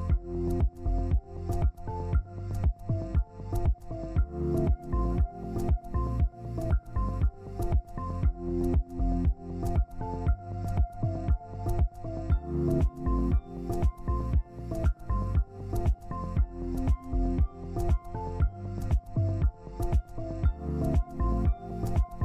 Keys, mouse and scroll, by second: 2.8 alt+Tab, 5.2 double click, 8.8 ctrl+space, 10.3 right click, 13.0 ctrl+alt+click, 17.9 z, 19.2 ctrl+space.